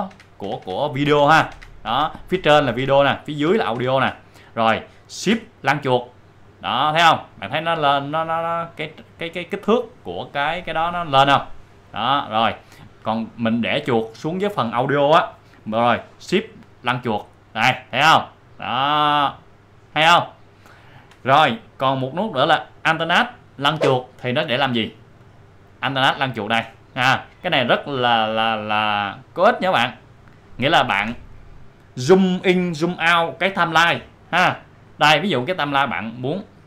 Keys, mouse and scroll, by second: 1.5 shift+scroll up 1, 6.2 shift+scroll up 1, 7.3-8.6 shift+scroll down 1, 16.3 shift+scroll down 1, 16.6 shift+scroll, 17.4-17.8 scroll up 1, 21.2-21.7 shift+scroll up 1, 25.2-25.8 shift+scroll up 1, 25.8-26.3 alt+scroll down 1, 27.4 alt+scroll up 1, 34.6-35.4 alt+scroll up 1.